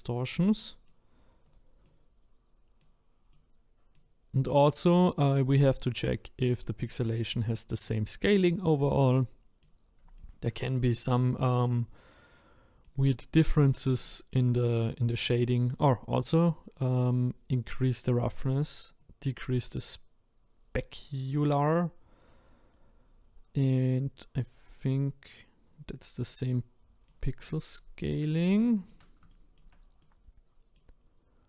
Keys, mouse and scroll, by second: 0.2-0.5 scroll up 1, 0.5 middle click, 1.5 click, 1.8-11.2 middle drag, 11.8-13.4 middle drag, 13.4-14.0 scroll up 2, 14.0 shift+middle click, 14.5-15.5 scroll up 6, 15.7-17.9 scroll up 1, 17.9-22.7 drag, 22.7 scroll up 1, 26.2-27.4 middle drag, 27.4-28.6 scroll down 18, 28.6-31.0 shift+middle drag, 31.0-31.4 scroll up 1.